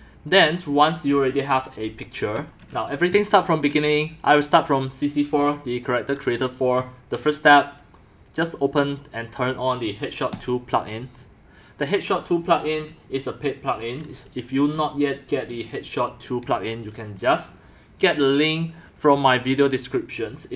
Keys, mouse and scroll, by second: 0.4 click, 5.2 drag, 6.4-8.6 drag, 10.3 click, 10.6 click, 11.0 click, 11.4-15.6 drag.